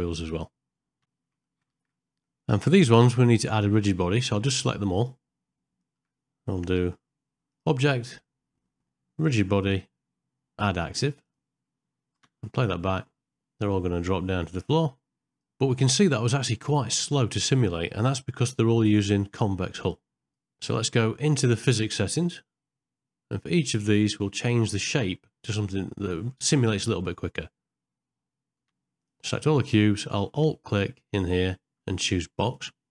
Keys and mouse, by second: 0.5 click, 1.2 ctrl+middle click, 1.5 middle click, 1.7 shift+middle click, 2.0 shift+middle click, 3.3 shift+click, 4.2 middle click, 4.8 click, 5.4 middle click, 5.8 shift+middle click, 7.6-11.3 drag, 12.3 space, 15.6 space, 16.2 shift+Left, 22.2 middle click, 29.0 shift+click, 31.6 alt+click.